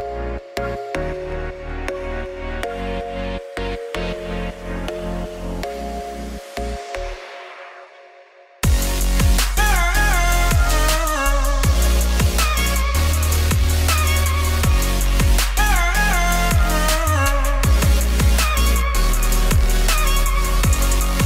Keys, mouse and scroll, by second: 0.8 g, 1.4 alt+h, 1.5 a, 1.9 click, 2.3 l, 2.5 l, 3.5 s, 4.2 s, 5.5 g, 6.4 Tab, 7.1 click, 7.6 Tab, 7.9 Tab, 8.4 click, 8.6 Tab, 9.0 click, 10.8 r, 11.7 click, 12.2-12.5 scroll down 1, 12.5-14.2 shift+middle drag, 14.3 scroll up 5, 14.5 Tab, 18.8-20.1 drag, 20.9 click.